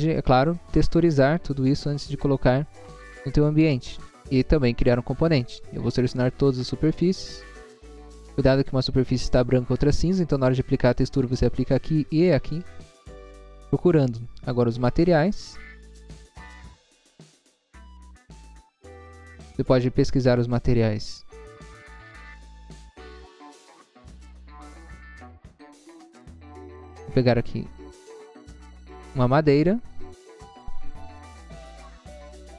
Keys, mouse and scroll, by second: 0.2-1.4 scroll up 1, 1.7 scroll down 1, 3.6 scroll down 1, 4.1 middle click, 5.4 middle click, 6.3 click, 7.2 click, 17.1 click, 21.7 click, 25.5-26.2 scroll down 1, 26.2-26.7 scroll down 1, 27.3 scroll down 1, 27.9-28.5 scroll down 2, 29.0 click.